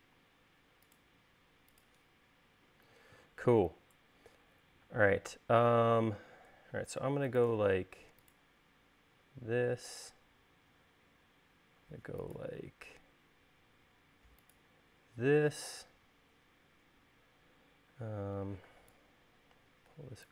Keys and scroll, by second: 10.3 l, 18.7 p.